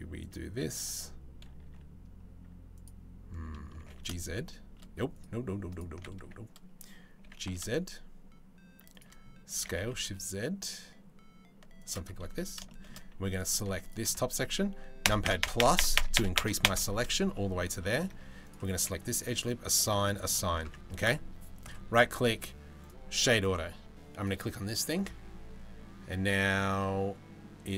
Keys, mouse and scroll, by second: 1.3 2, 2.4 click, 3.4 g, 5.3 alt+click, 6.9 g, 9.2 s, 11.9 3, 12.3 middle click, 12.8 1, 13.3 3, 14.7 ctrl+KP_Add, 14.9 ctrl+KP_Add, 15.2 ctrl+KP_Add, 15.4 ctrl+KP_Add, 15.8 ctrl+KP_Add, 16.0 ctrl+KP_Add, 17.0 middle click, 17.4 middle click, 19.0 click, 20.3 Tab, 21.3-22.6 drag, 27.5 right click.